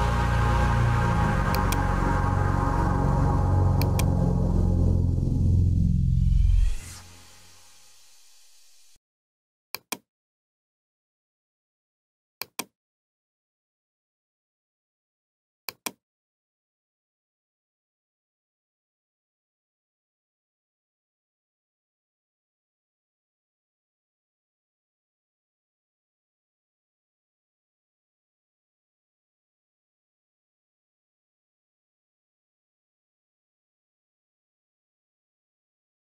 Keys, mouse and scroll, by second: 0.1 Return, 1.1-6.3 typing, 1.6 click, 3.9 click, 7.6-8.4 typing, 9.8 click, 12.5 click, 15.8 click, 16.5-18.2 typing, 18.5 Return, 20.8 typing.